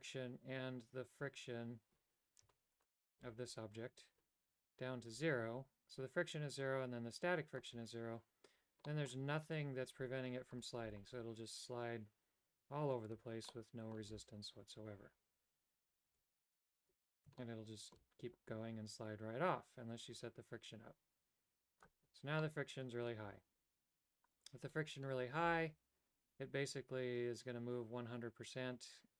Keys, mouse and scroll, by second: 2.8 Tab, 6.8-7.8 drag, 9.0 middle click, 10.0 Tab, 10.7 right click, 11.1 g, 13.6 middle click, 16.4 Tab, 17.5 shift+middle click, 19.7-22.0 drag, 22.6 middle click, 24.5 right click, 25.7 g.